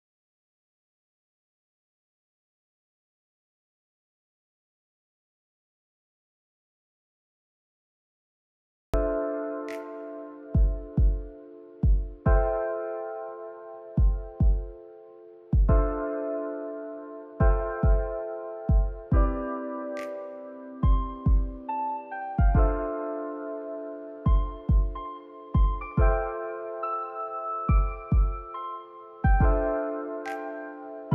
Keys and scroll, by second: 0.4 space, 0.8 ctrl+s, 8.8 u.